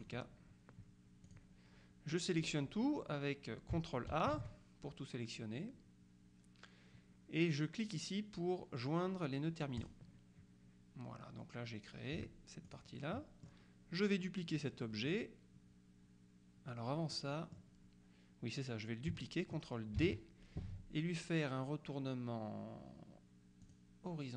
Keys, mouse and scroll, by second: 0.1 click, 1.4 click, 4.2 ctrl+a, 9.9 click, 12.7 click, 17.2 middle click, 20.0 ctrl+d, 23.7 click.